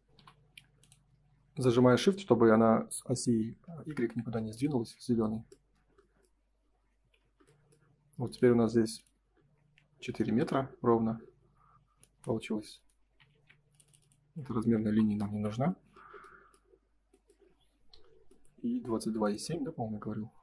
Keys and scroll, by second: 0.1 m, 5.2 space, 6.6 Escape, 7.0 F4, 11.3 Escape, 12.5 space, 13.3 ctrl+z, 14.8 Delete.